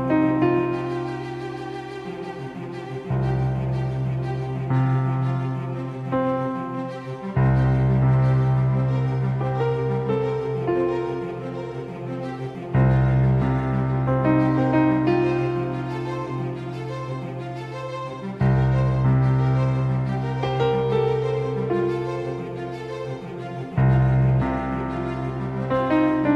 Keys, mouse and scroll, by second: 4.6 g, 9.6 g, 14.4 g, 18.8-24.1 right drag, 21.0 s, 25.0-26.3 drag.